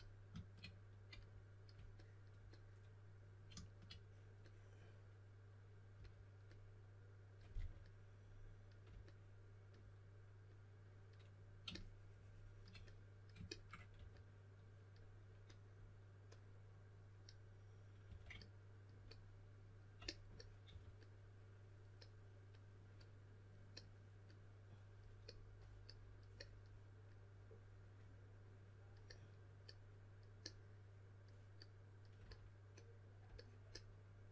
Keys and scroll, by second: 7.5 4, 13.9 typing, 18.0 typing, 20.6 4.